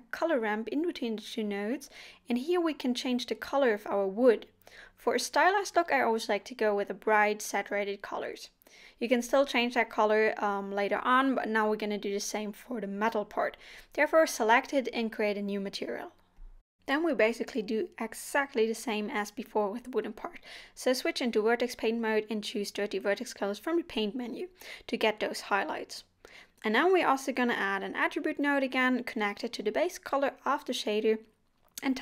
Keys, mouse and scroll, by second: 2.0 scroll down 2, 2.2 middle click, 2.6 scroll up 2, 2.8 shift+middle click, 3.6 click, 4.3 click, 5.8 click, 7.5 scroll down 4, 8.0 middle click, 8.8 middle click, 9.4-9.7 scroll up 4, 10.0 middle click, 10.5 scroll down 1, 23.9 click, 25.3 scroll down 1, 25.8 scroll up 2, 27.4 shift+a, 30.0 click, 31.6 click.